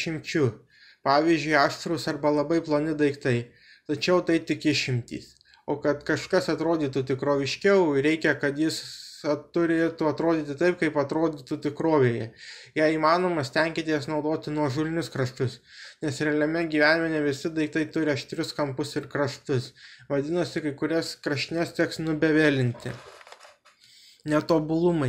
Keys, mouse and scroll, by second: 1.1-3.2 drag, 3.2 middle click, 4.5-6.2 drag, 7.2-11.4 drag, 8.2 BackSpace, 8.3 BackSpace, 9.2 KP_1, 11.6-14.3 middle drag, 15.3-16.7 middle drag, 17.8-18.6 middle drag, 20.1-23.9 drag, 24.4 middle click.